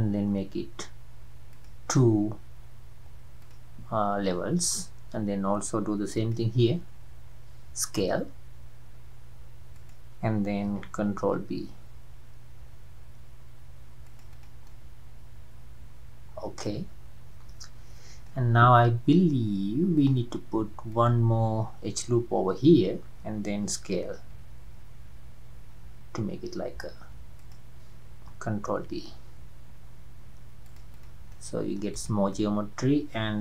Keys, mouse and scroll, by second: 6.2 alt+click, 7.9 s, 11.3 ctrl+b, 14.3 click, 14.7-17.7 middle drag, 20.0-24.1 drag, 24.3 s, 28.7 ctrl+b, 30.9 click, 31.3 middle click, 31.9 click, 32.3-33.4 middle drag.